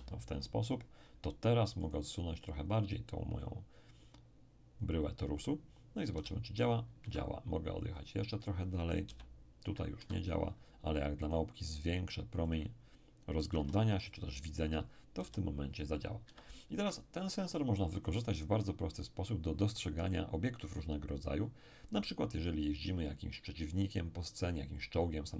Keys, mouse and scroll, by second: 1.8-4.4 right drag, 2.8 click, 6.1 p, 7.0 Escape, 8.0 click, 9.1 p, 10.0 Escape, 11.2 right click, 12.5 click, 13.5 2, 14.1 click, 14.1 5, 15.2 p, 16.3 Escape.